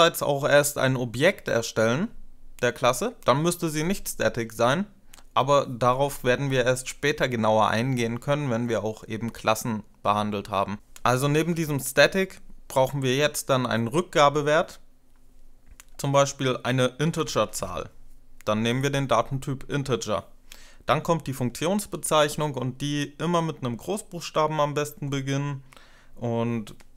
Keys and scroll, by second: 11.2 space, 16.7-17.7 typing.